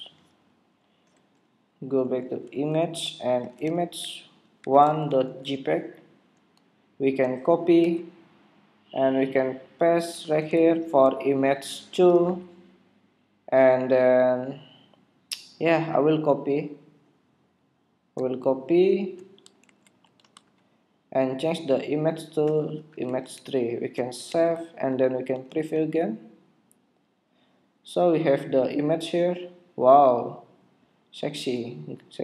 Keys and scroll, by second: 7.7 super+c, 10.5 super+v, 19.5 super+c, 20.4 super+v, 24.2 super+Tab, 25.5 super+r.